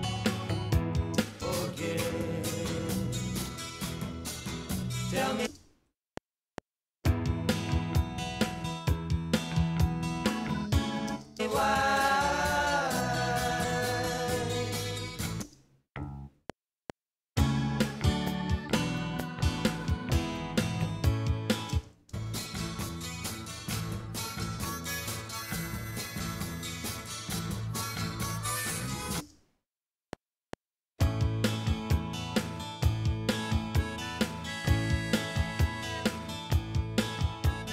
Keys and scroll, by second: 1.1 space, 2.2 Right, 5.5 space, 6.0 F7, 11.1 space, 12.3 Right, 15.5 space, 16.3 F7, 21.7 space, 29.2 space, 29.9 F7.